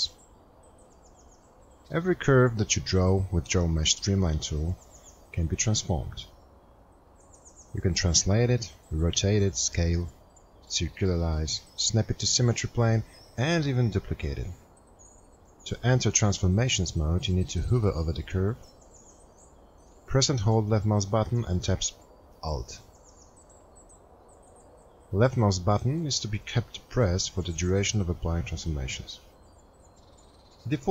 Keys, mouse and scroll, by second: 23.8 alt+click.